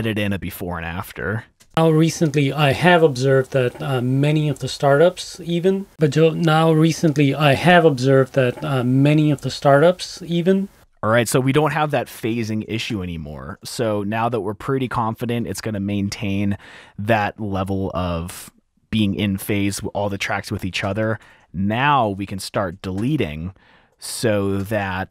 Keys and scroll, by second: 1.1 r, 1.8 space, 4.7 space, 5.9 space, 7.7 t, 9.3 F7, 11.3 F7, 13.0 F2, 13.9 t, 14.1 t, 21.1 F2, 21.4 F2, 22.2 F2, 22.8 super+`, 24.5 super+`, 24.5 F2.